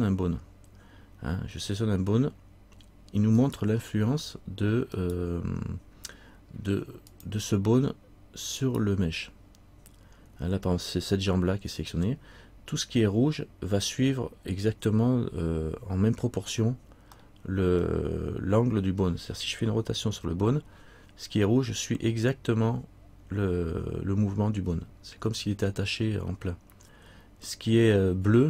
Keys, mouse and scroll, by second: 3.6 right click, 7.3 click, 8.8 right click, 16.6-17.3 scroll down 1, 17.3-17.9 scroll down 1, 17.9 middle click, 20.3 r.